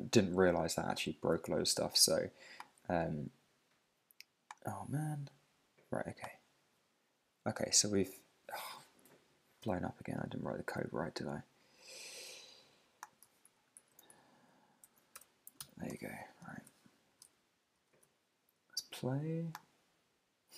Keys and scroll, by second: 1.4 super+Tab, 9.6 super+Tab, 13.8 shift+super+Right, 14.8 alt+shift+Left, 15.6 super+s, 15.9 super+Tab, 16.7 super+Tab, 18.0 super+Tab.